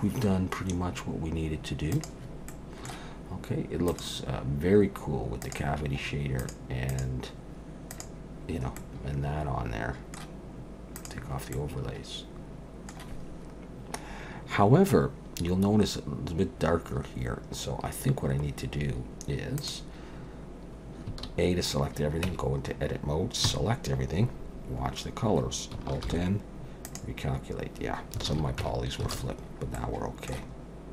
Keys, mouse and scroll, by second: 2.5 middle click, 3.9 click, 8.8 middle click, 11.0 click, 11.6 middle click, 19.6 click, 21.1 a, 22.3 Tab, 23.5 a, 24.9-25.7 scroll up 3, 26.1 alt+n, 28.3 alt+a, 28.6 Tab, 29.2 alt+a, 29.4-30.0 scroll down 3, 29.8 middle click.